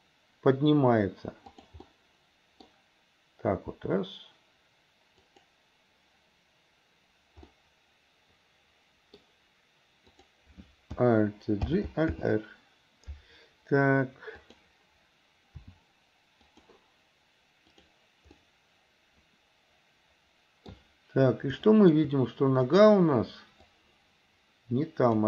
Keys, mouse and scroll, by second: 1.9 scroll up 1, 2.1 middle click, 2.7-3.8 scroll down 1, 3.8 g, 7.6-10.1 middle drag, 10.1 click, 11.7 alt+g, 12.2 alt+r, 14.4 click, 15.7 r, 18.4-20.7 middle drag, 21.7 shift+middle click, 22.7 click, 23.9-25.2 drag.